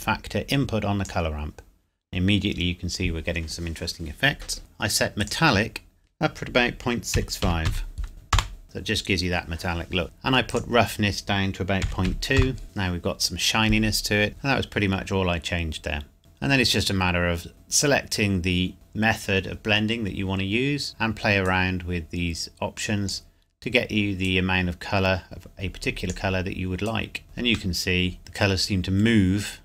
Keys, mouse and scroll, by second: 5.3 click, 7.5 KP_Decimal, 7.8 KP_5, 8.3 KP_Enter, 10.7 click, 12.1 KP_Decimal, 12.3 KP_2, 12.5 KP_Enter, 14.3 middle click, 16.2-17.5 scroll up 1, 17.5 click, 21.6 click, 27.2 scroll down 1, 27.8 middle click.